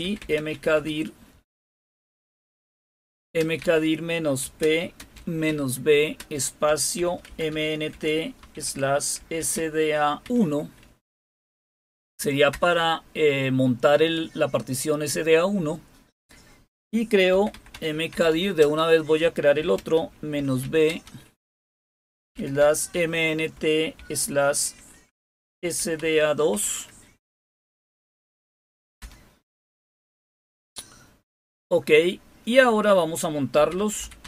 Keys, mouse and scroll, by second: 0.0-0.7 typing, 1.9-10.2 typing, 12.4 Return, 17.2-20.8 typing, 22.0-23.9 typing, 25.5-26.4 typing, 28.9 Return, 30.3 typing, 33.3-34.2 typing.